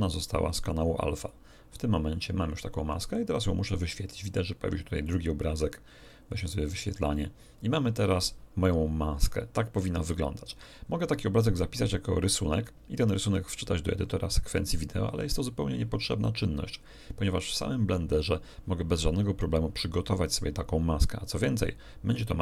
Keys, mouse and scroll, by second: 1.2 click, 5.0 right click, 6.6 click.